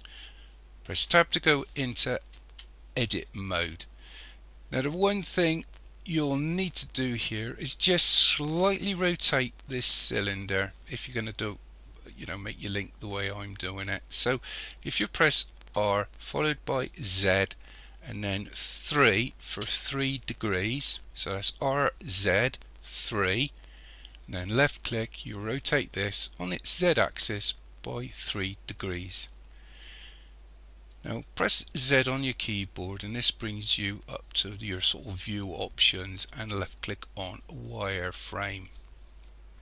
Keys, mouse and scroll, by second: 1.0 Tab, 5.1-5.5 scroll up 1, 5.5-8.7 scroll down 3, 15.7 r, 31.9 z.